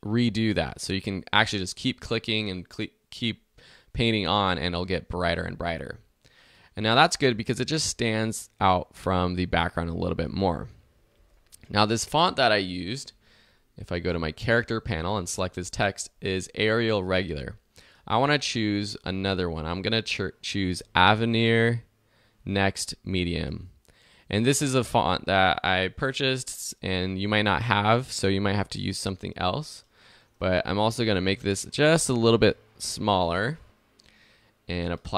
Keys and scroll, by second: 7.3 alt+z.